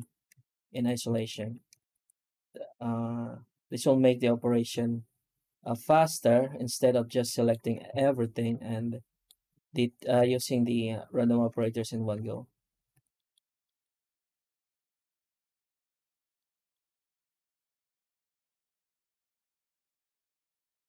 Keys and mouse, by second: 0.6 right click, 1.0 middle click, 1.3 Tab, 1.7 shift+q, 6.7 ctrl+z, 7.1 middle click, 7.5 Tab, 7.7 a, 8.5 shift+middle click, 10.1 shift+q, 12.0 Tab, 12.8 alt+a, 13.0 middle click, 13.5 shift+middle click, 13.9 middle click, 14.2 z, 16.3 middle click, 17.6 shift+middle click, 17.9 middle click, 18.7 middle click, 19.8 shift+middle click.